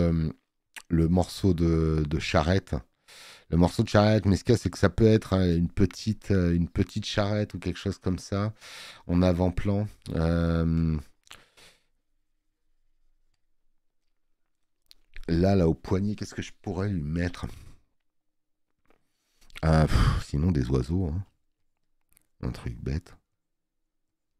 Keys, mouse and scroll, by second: 14.2 scroll up 1, 15.2 space, 15.4 click, 17.8 alt+scroll.